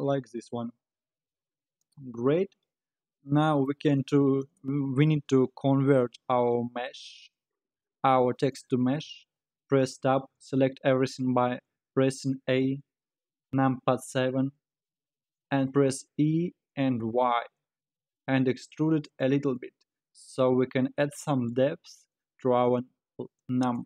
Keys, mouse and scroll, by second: 3.2-4.4 middle drag, 4.4-9.3 right drag, 9.3 Tab, 9.7 scroll down 2, 10.7 a, 13.6 KP_7, 14.6-16.1 scroll down 4, 16.1 e, 19.6-20.7 middle drag, 20.7-21.2 scroll up 3, 21.2 scroll down 2, 21.5-23.8 middle drag.